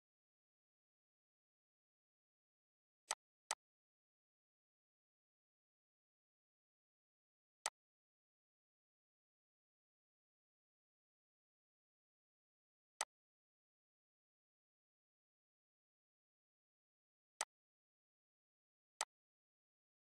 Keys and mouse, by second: 2.7 click, 7.3-12.7 drag, 17.0-20.1 drag.